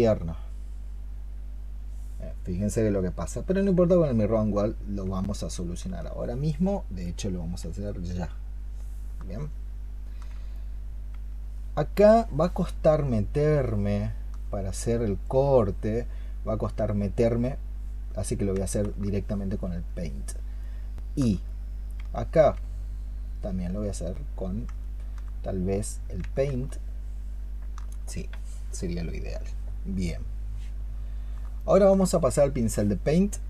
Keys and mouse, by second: 9.3 alt+click, 13.7 alt+click, 18.9 alt+click, 19.7 alt+click, 20.5 alt+click, 24.7 alt+click, 26.5 alt+click, 31.5 alt+click.